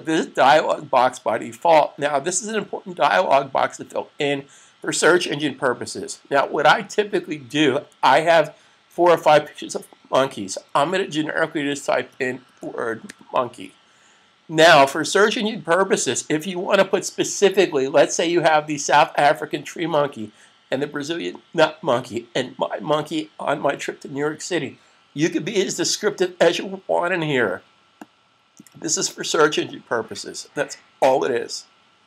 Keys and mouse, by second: 11.7-12.1 typing, 15.1 typing, 27.9 click.